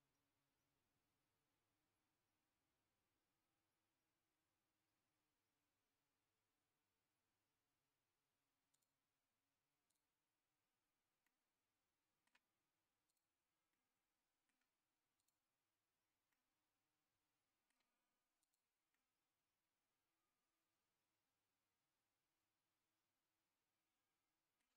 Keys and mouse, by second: 8.7-10.1 drag, 11.2-12.3 middle drag, 13.1 click, 13.7 middle click, 15.2 click, 16.3-17.7 middle drag, 18.4 click, 18.9-24.6 middle drag.